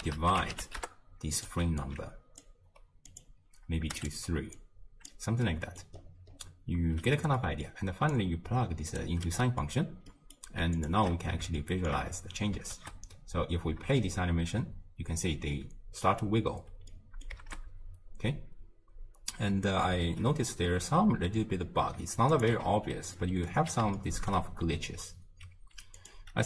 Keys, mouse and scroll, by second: 1.8 alt+click, 3.1 click, 4.5 click, 5.5 middle click, 5.8 scroll up 1, 6.0-7.0 scroll down 8, 7.4 middle click, 8.1 drag, 9.4-10.8 middle drag, 10.8 alt+shift+click, 11.6-12.1 shift+middle drag, 12.1 scroll up 3, 12.8 shift+space, 13.8 space, 16.6 space, 16.9-17.5 middle drag, 17.5 shift+space, 19.5 space, 20.1 shift+space, 21.1 space, 22.4 click, 22.6 m, 23.2-23.6 middle drag, 23.6-24.0 scroll up 1, 24.0-26.0 shift+middle drag, 26.0 click.